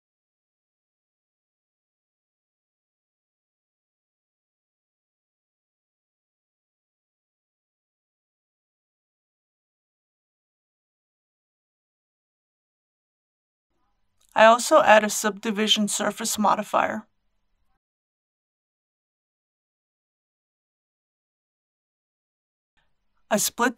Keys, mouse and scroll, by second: 1.0 alt+click, 2.9 right click, 4.7 click, 7.2 alt+shift+click, 7.8 right click, 8.8 click, 9.2 Tab, 9.6-13.4 middle drag, 13.7 Tab, 14.9 ctrl+2, 16.5-20.4 middle drag, 21.2 click, 22.7-23.2 scroll down 1, 23.2 click.